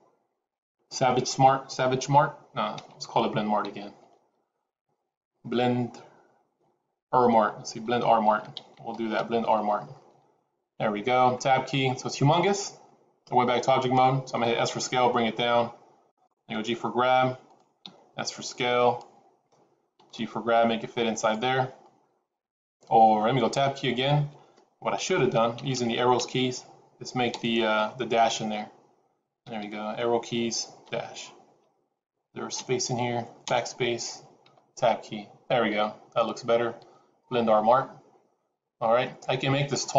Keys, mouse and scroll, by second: 2.8-4.4 typing, 6.4-9.0 typing, 10.0-10.7 scroll down 3, 10.7-11.2 scroll down 1, 11.2 Tab, 14.6 s, 16.4 g, 17.8 s, 19.9 g, 23.4 Tab, 24.9 Left, 25.1 Left, 25.2 Left, 25.5 Left, 25.6 Left, 26.1 Left, 27.2 BackSpace, 27.7 -, 29.4 Right, 30.1 Right, 30.8 -, 32.5 Left, 33.4 BackSpace, 34.4 Tab.